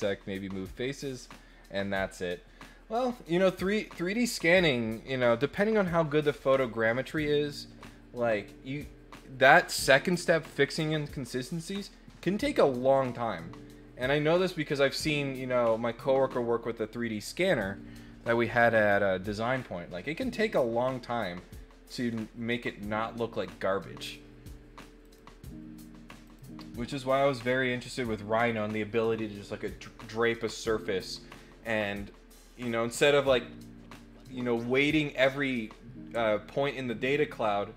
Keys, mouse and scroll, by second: 25.0 click, 26.2 click, 26.9 click.